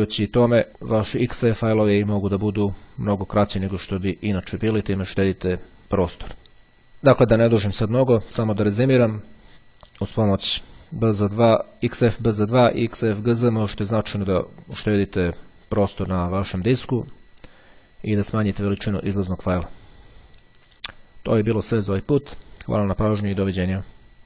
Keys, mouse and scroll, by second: 2.7 click, 9.2 click, 10.3 click, 12.8 click.